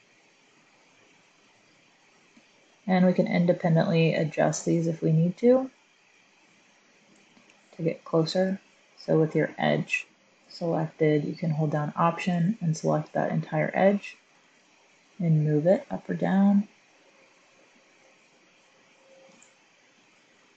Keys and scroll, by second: 14.2 g, 14.6 z.